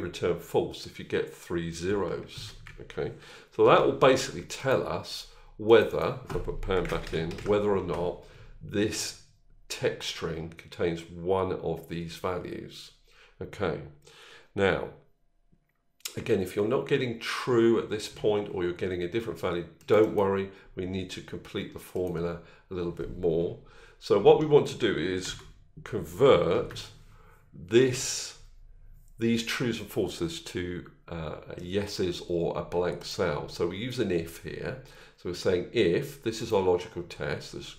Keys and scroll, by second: 2.1 ctrl+z.